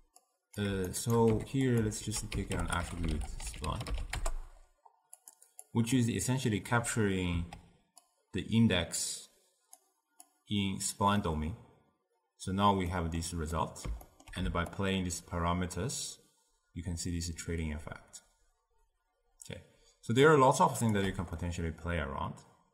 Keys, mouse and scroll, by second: 0.4 click, 1.0 shift+right click, 1.4 g, 2.1 ctrl+a, 2.8 t, 5.8-10.4 drag, 11.3-14.8 middle drag, 14.8-17.9 shift+drag, 21.5-22.7 middle drag.